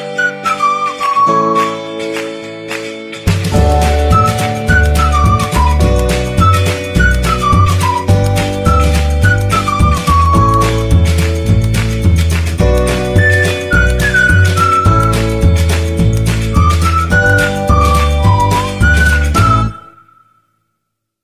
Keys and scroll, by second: 0.9 shift+s, 2.1 s, 3.2-4.5 typing, 6.0 0, 6.4 F12, 8.1 Escape, 9.0 ctrl+r, 10.1 e, 10.2 z, 15.6 F12, 17.8 Escape, 18.3 s, 18.7 1, 19.2 a, 20.6 F12.